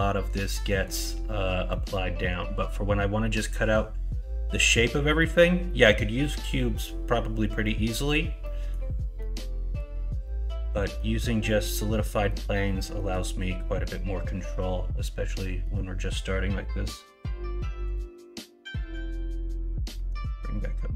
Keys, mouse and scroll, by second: 0.5 middle click, 1.6 middle click, 8.4 middle click, 9.1 middle click, 10.2 middle click, 10.9 middle click, 12.2 middle click, 12.9 middle click, 15.7 middle click.